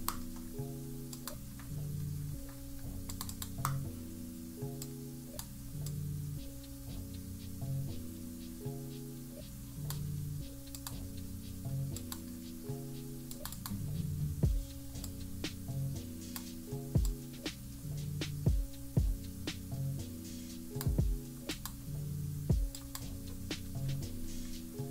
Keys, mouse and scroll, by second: 1.0-3.4 drag, 4.8 click, 5.8-10.0 drag, 10.7 click, 11.9 click, 13.4 click, 15.0-16.3 drag, 17.0-20.7 drag, 21.6 click, 22.7 click, 23.4 -, 23.6 -, 23.8 -, 24.0 -, 24.6 scroll up 2.